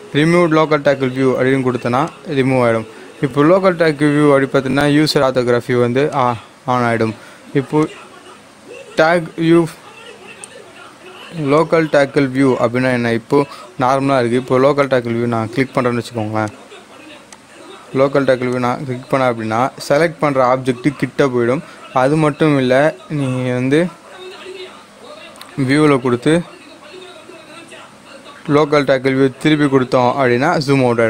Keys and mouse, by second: 2.1 click, 6.1 click, 11.4 click, 14.7 click, 25.8 click, 28.5 click.